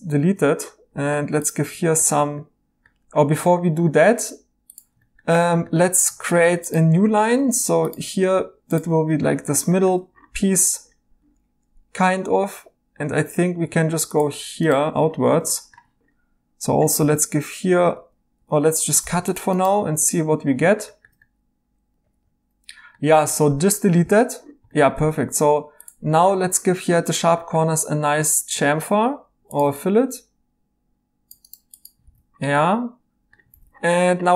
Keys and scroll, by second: 1.1 typing, 7.0 a, 17.0 b, 17.9 Escape, 19.0 c, 23.3 x, 24.0 e, 25.0 typing, 32.0 e, 33.7 e.